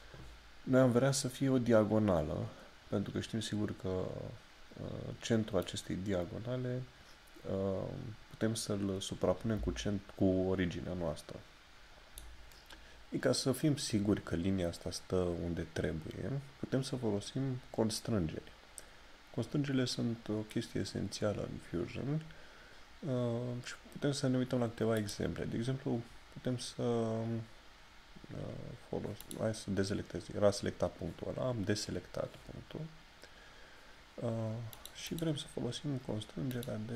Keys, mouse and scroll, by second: 5.6 click, 25.0 click, 29.2 click, 34.7 click.